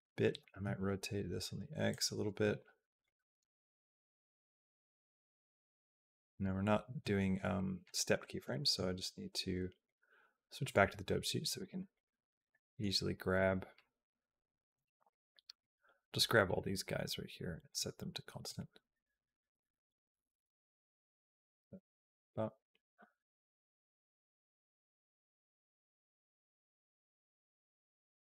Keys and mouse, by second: 0.2 r, 2.9-6.3 drag, 8.3 shift+middle click, 9.8 click, 11.4 shift+middle click, 11.7 click, 12.3 middle click, 13.1 click, 14.6 b, 16.4-17.6 right drag, 18.3-28.3 drag.